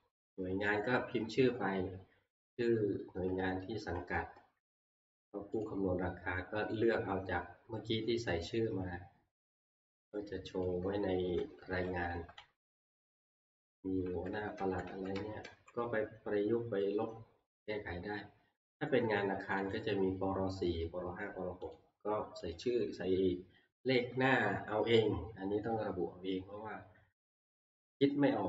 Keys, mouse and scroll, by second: 0.8 click, 3.2 Right, 3.2 click, 3.9 Right, 4.3 Right, 4.7 Right, 4.9 Right, 5.6 click, 6.8 right click, 10.2 click, 10.6 click, 10.9 Right, 11.2 Right, 11.5 Right, 11.6 Right, 11.9 Right, 12.1 Right, 12.4 Right, 13.3 Right, 13.5 Right, 13.8 Right, 14.1 Right, 14.4 Right, 14.6 Right, 14.9 Right, 15.2 Right, 15.5 Right, 17.6 click, 19.8 click, 21.8 click, 22.6 click.